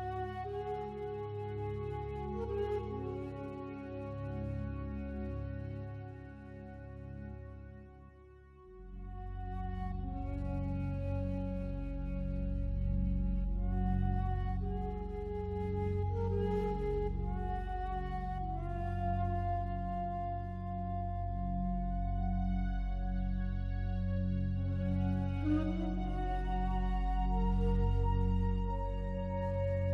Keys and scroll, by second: 20.5 ctrl+z.